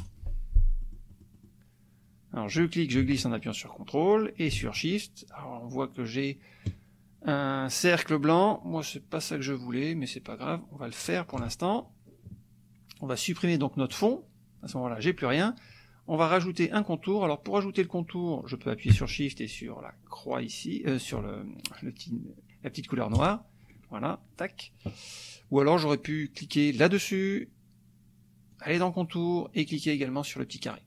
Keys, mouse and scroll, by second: 0.1 click, 0.9 middle click, 2.6-11.6 drag, 13.9 click, 23.3 shift+click, 26.8-27.8 drag, 28.5 click, 30.5 click.